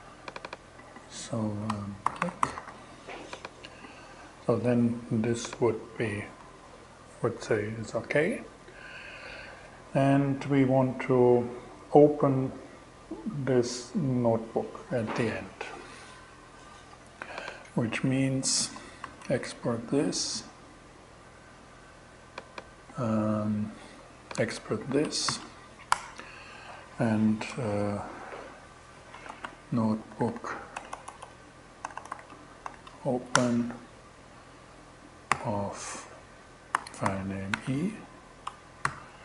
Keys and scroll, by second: 1.3-2.5 typing, 5.8 BackSpace, 18.5 shift+,, 19.8 BackSpace, 24.7 shift+,, 25.3 shift+Return, 28.2-32.1 typing, 32.8 shift+Return, 33.4 alt+Return, 34.7 alt+g, 35.9-38.3 typing, 38.9 shift+Return.